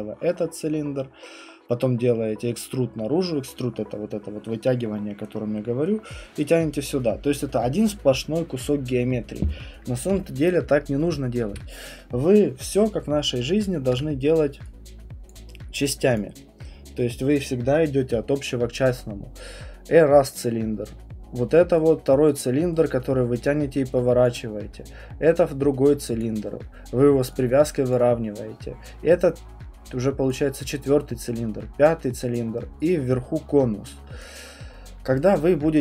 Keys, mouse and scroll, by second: 6.7 click, 11.0 Escape, 11.5 Escape, 13.9 Print, 15.3 Print, 15.3 click, 16.2 click, 20.3 click, 22.3 click, 24.2-25.4 drag, 26.2-29.3 drag, 30.3-31.3 drag, 32.3 click, 34.2 click.